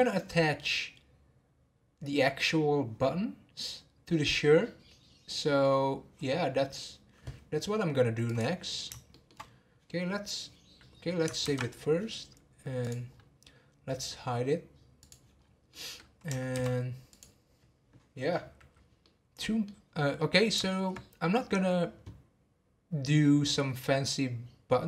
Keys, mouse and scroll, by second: 8.2 click, 9.1 shift+middle click, 9.4-10.9 scroll down 1, 10.9-11.4 scroll down 5, 11.4 ctrl+s, 12.8 click, 13.1 scroll up 1, 15.0 click, 15.4-15.7 scroll down 1, 15.7-16.5 middle drag, 16.5 shift+s, 19.0-23.4 middle drag.